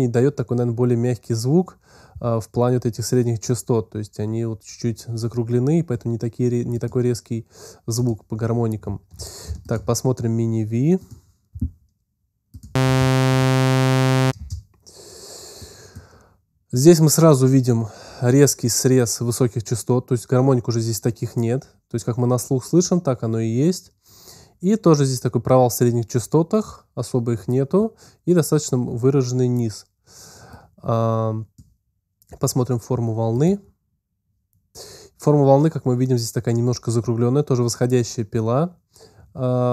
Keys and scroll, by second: 12.7 space, 14.2 space, 14.8 space.